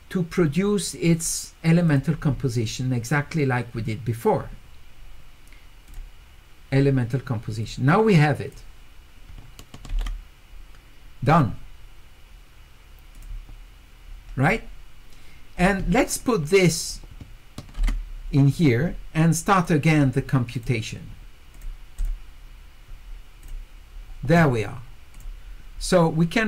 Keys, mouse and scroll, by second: 1.9 click, 5.9 click, 7.6 click, 13.1 click, 14.4 click, 16.2 click, 19.6 click, 20.6 click, 21.5 click, 22.0 click, 23.4 click.